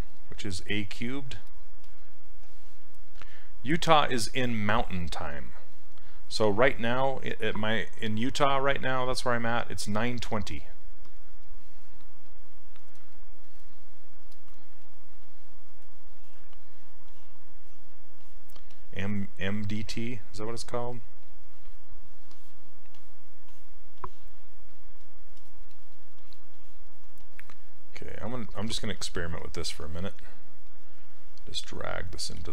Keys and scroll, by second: 19.5 s, 29.0 s, 29.8 s, 32.4 ctrl+z.